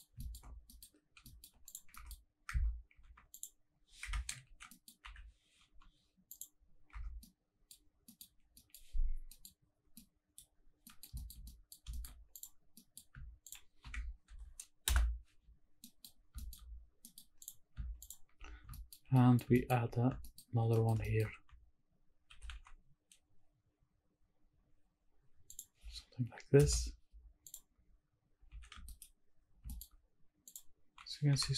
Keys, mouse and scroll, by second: 0.0 scroll down 2, 0.2 shift+middle drag, 0.7 middle drag, 0.9 scroll up 1, 1.2 scroll down 1, 1.2 shift+middle drag, 1.6 click, 1.9 middle click, 2.4 scroll up 1, 2.5 Tab, 3.1 ctrl+r, 4.0 Escape, 4.5 ctrl+z, 4.7 middle click, 5.0 a, 5.7 u, 6.9 Tab, 7.1 scroll down 1, 7.2-7.7 middle drag, 7.8 scroll down 1, 8.0 scroll up 1, 8.1 middle drag, 8.5 scroll down 1, 8.5 middle drag, 9.3 middle click, 9.7 scroll up 1, 10.0-10.4 middle drag, 10.5-10.8 scroll up 1, 10.8 middle drag, 11.1 shift+middle drag, 11.4 middle drag, 11.9 shift+middle click, 12.3 click, 12.6 scroll down 1, 12.7 middle click, 13.5 shift+click, 14.2 ctrl+l, 15.6 scroll down 1, 15.8 middle drag, 16.3 shift+middle drag, 16.7 scroll up 1, 17.0 scroll down 1, 17.0 middle click, 17.4 click, 18.0 shift+click, 18.3-18.7 scroll down 3, 18.7 shift+middle drag, 19.1 middle drag, 19.5 shift+middle drag, 19.7 shift+scroll up 1, 20.0 scroll down 1, 20.2 shift+middle drag, 20.7 middle click, 21.0 shift+middle drag, 22.3 alt+d, 22.5 x, 25.5 click, 26.5 KP_0, 27.5 click, 27.8-28.4 scroll up 2, 28.5 ctrl+s, 28.8 shift+middle drag, 29.0-30.2 scroll up 4, 29.7 shift+middle drag, 30.5 click, 31.3 g.